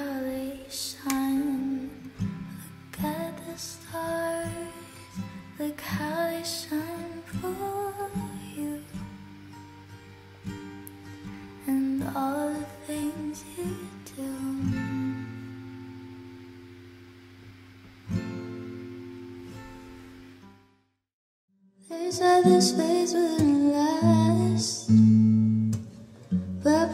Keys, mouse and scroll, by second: 26.5 F9.